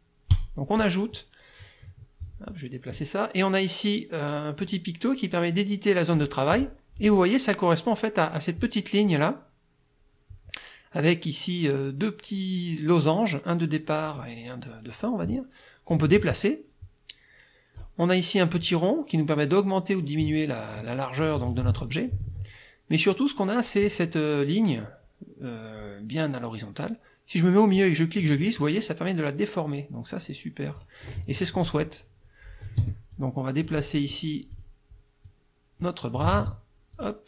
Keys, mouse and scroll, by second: 0.3 click, 2.2 click, 6.2 click, 15.9-18.0 drag, 18.6-21.4 drag, 21.6 ctrl+z, 27.8-31.0 drag, 32.8 F1, 33.2-34.3 drag, 33.8 right click, 34.5 click, 35.3 click, 36.4 ctrl+z, 37.0 ctrl+click.